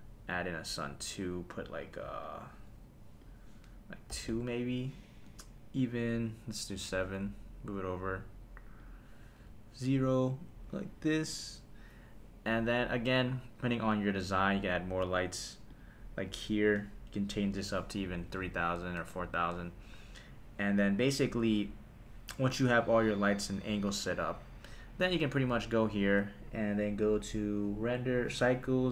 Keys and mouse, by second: 0.8 click, 1.8 click, 2.7 click, 3.2-4.4 drag, 5.3 g, 6.0 click, 6.7 KP_7, 7.3 g, 8.8 click, 9.4 KP_0, 10.5 g, 11.3 click, 15.7 click, 17.4-19.0 drag, 18.3 KP_0, 18.4 KP_0, 25.9 click.